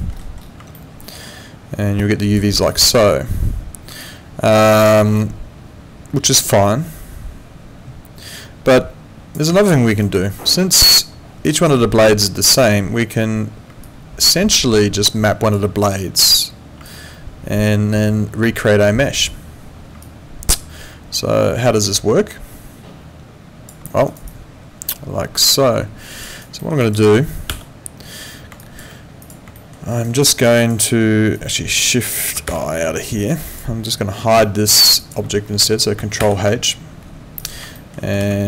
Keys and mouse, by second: 0.7 alt+middle click, 2.0 click, 2.7 alt+middle click, 4.0 alt+click, 4.8 alt+middle click, 5.1 alt+click, 9.6 alt+middle click, 9.9 alt+right click, 10.1 alt+click, 13.8 alt+click, 16.8 alt+click, 20.0 alt+click, 23.9 alt+middle click, 24.1 alt+right click, 24.3 alt+click, 26.3 alt+right click, 26.6 alt+middle click, 26.8 alt+click, 27.5 F8, 28.6 alt+click, 29.6 alt+middle click, 29.9 alt+right click, 30.2 alt+click, 31.4 click, 34.4 alt+middle click, 34.8 alt+right click, 35.0 alt+click, 36.2 ctrl+h, 37.4 click, 37.8 alt+middle click, 38.2 w.